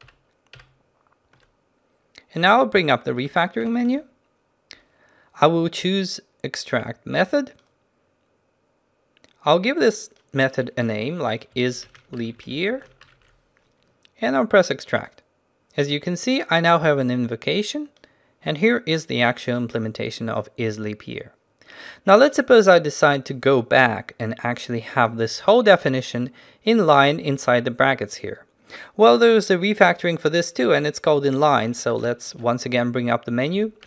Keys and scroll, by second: 3.7 ctrl+w, 32.1 ctrl+alt+shift+t.